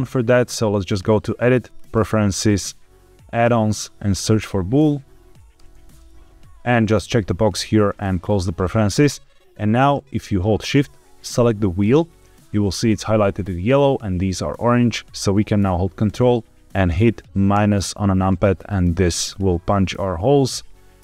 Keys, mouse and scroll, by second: 0.8-1.8 drag, 9.9-10.3 middle drag, 11.7 shift+click, 12.6 scroll up 2, 17.6 ctrl+KP_Subtract, 18.6-20.1 middle drag.